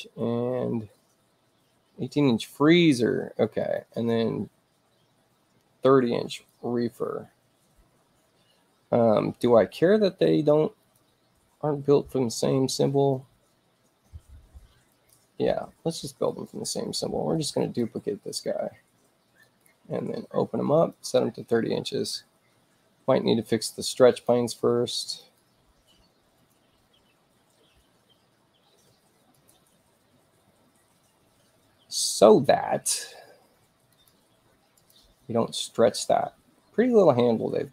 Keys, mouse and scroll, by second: 2.2 click, 3.5 click, 3.8 click, 6.2 click, 10.7 click, 13.0-15.0 drag, 14.8-16.4 right drag, 17.5 click, 19.3 right click, 20.7 click, 24.0 click, 25.1 right click, 26.3 click, 29.3 click, 33.8 click, 34.7 click.